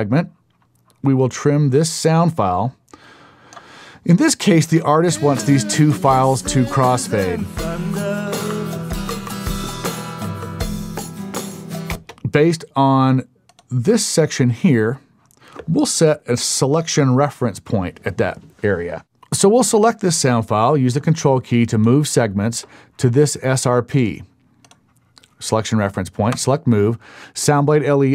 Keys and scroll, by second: 4.7 space, 11.9 space, 17.7 super+;.